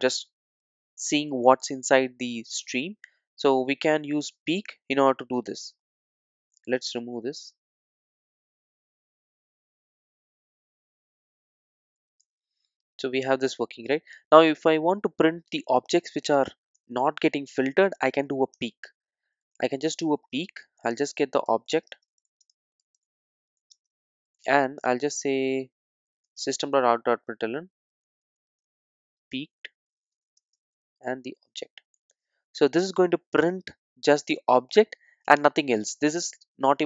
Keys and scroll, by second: 8.7 alt+super+l, 10.9 Tab, 12.2 alt+super+l, 18.6 Return, 26.3 Tab, 32.0 Return.